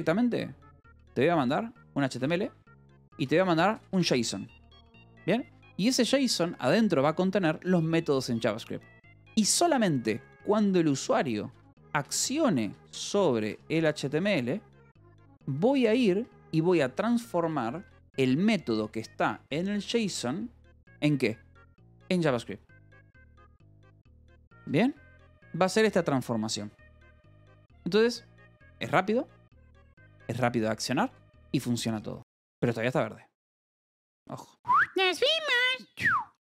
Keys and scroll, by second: 0.8 v, 1.4 e, 2.1 c, 3.3-6.1 typing, 6.8 Escape, 9.3 h, 10.0 o, 11.2-15.0 typing, 16.1 BackSpace, 17.0 =, 17.4 space, 17.7 BackSpace, 19.4-20.4 typing, 23.0-25.2 typing, 24.2 Escape, 26.9 Escape, 28.3-31.3 typing, 29.6 Escape, 31.1 Escape.